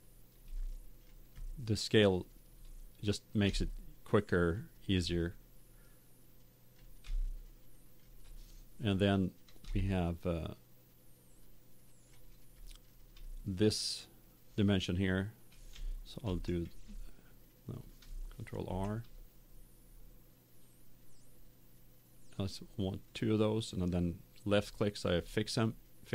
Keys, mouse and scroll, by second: 0.5-3.0 middle drag, 3.0 middle click, 3.6-5.2 middle drag, 5.8-7.5 drag, 7.5-9.1 middle drag, 9.8-11.7 middle drag, 12.5-14.4 middle drag, 16.2 ctrl+f, 18.6 ctrl+r, 23.8-25.7 drag.